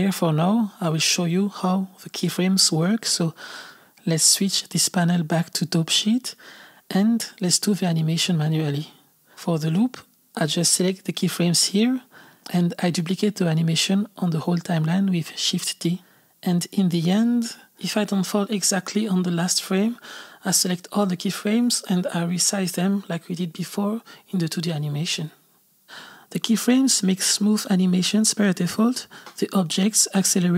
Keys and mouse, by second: 1.4 click, 4.3-8.4 drag, 9.9-12.8 drag, 13.8 shift+d, 15.6 click, 15.8 shift+d, 16.7 shift+d, 17.7-22.3 drag, 22.3 s, 25.2-26.2 drag, 26.2 space, 28.6 space, 29.0 click, 30.2-30.5 drag.